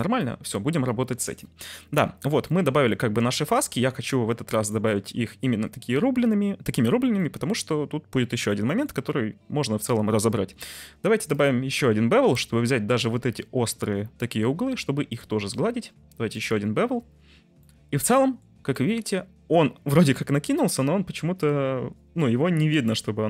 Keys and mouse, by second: 0.3 middle click, 2.5-2.9 middle drag, 3.6 ctrl+s, 4.0 middle click, 4.7 middle click, 7.2 middle drag, 8.4-8.8 middle drag, 11.3 click, 15.2-16.6 drag, 17.5-18.4 middle drag, 18.8 middle drag.